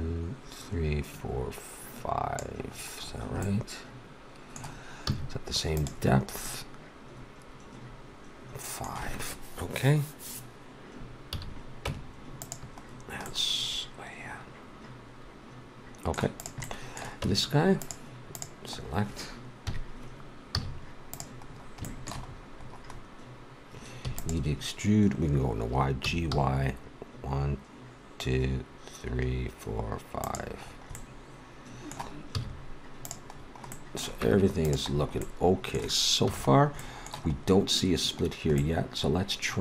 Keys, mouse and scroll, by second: 2.7 middle click, 3.1-5.8 middle drag, 5.0 z, 6.1 middle click, 6.7 middle click, 7.6 middle click, 11.3 a, 11.8 Tab, 16.3-18.0 drag, 17.2 Tab, 18.1 right click, 19.6 KP_3, 20.6 z, 24.0 e, 26.0 g, 30.6-33.0 middle drag, 32.3 z, 34.2 Tab, 36.3 a.